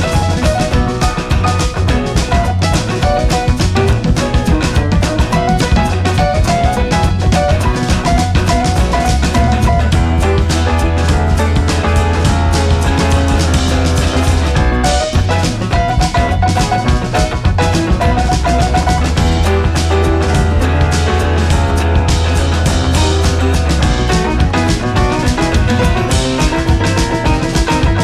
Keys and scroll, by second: 3.8 ctrl+a, 5.5 ctrl+a, 8.9 Delete, 12.7 space, 14.7 space, 20.5 Down, 23.5 Down, 23.6 Left, 24.5 Up, 24.7 Right, 24.8 Up, 24.8 Right, 25.0 Up, 26.0 Down.